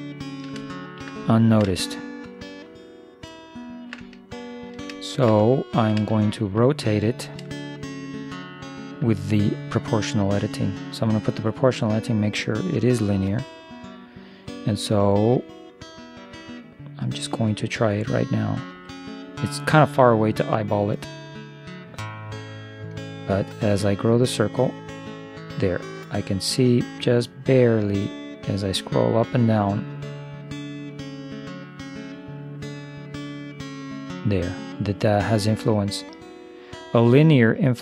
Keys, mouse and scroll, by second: 4.1-9.5 middle drag, 10.6 o, 12.2-14.2 drag, 18.7 r.